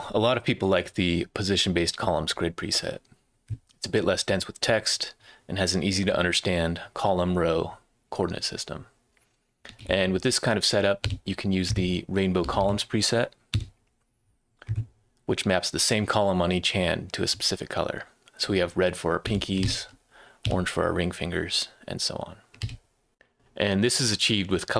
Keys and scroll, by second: 9.4-11.1 typing, 12.2-13.5 typing, 19.3 a, 19.6 BackSpace, 20.4 s, 22.6 BackSpace.